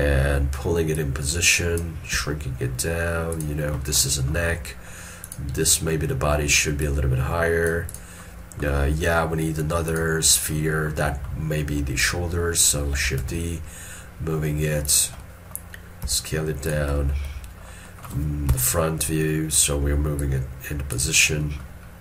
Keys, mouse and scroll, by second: 2.2 s, 4.1 middle click, 8.5 middle click, 8.9 scroll up 1, 11.7 scroll down 1, 13.3 shift+d, 15.3 middle click, 16.1 s, 17.1 middle click, 17.9 middle click, 18.6 1, 21.5 middle click, 21.9 scroll up 1.